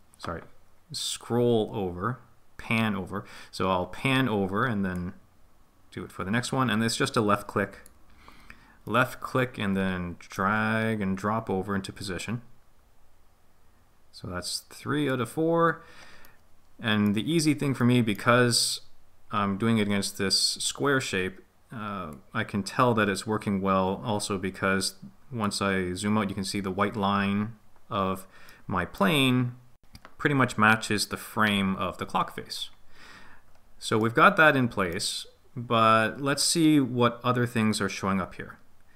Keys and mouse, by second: 5.0 click, 5.3-6.7 drag, 8.9-10.4 middle drag, 12.3 click, 16.3 middle click, 17.8 middle click, 22.1 click, 22.5 click, 28.5 middle click, 34.1 middle click, 37.4-38.9 drag.